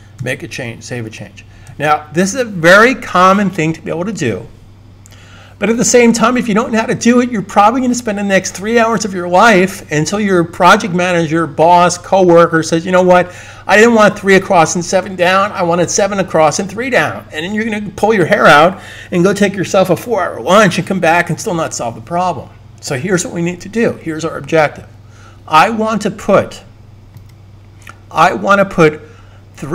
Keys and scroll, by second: 0.0 super+s.